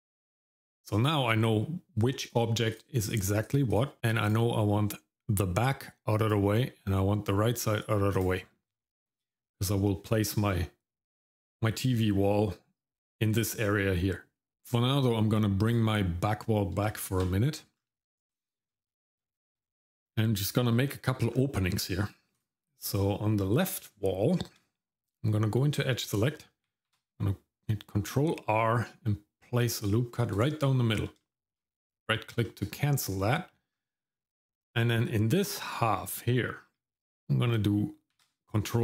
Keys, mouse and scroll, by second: 2.2 click, 2.7 click, 3.0 click, 3.4 click, 3.7 click, 4.2 click, 6.2 click, 8.1 click, 9.0-9.7 scroll up 1, 15.7 click, 16.9 shift+middle click, 17.8-18.3 scroll down 1, 18.3 shift+middle click, 18.9 middle click, 19.2-19.6 scroll up 1, 19.7 middle click, 20.0-20.8 scroll up 1, 20.8 middle click, 21.3-21.7 scroll down 1, 22.3 click, 23.9 Tab, 26.9 ctrl+r, 31.2 shift+middle click, 32.4 shift+middle click, 32.9 scroll up 1, 33.0 scroll down 1, 33.3 middle click, 33.7-35.5 scroll up 1, 38.1 ctrl+r.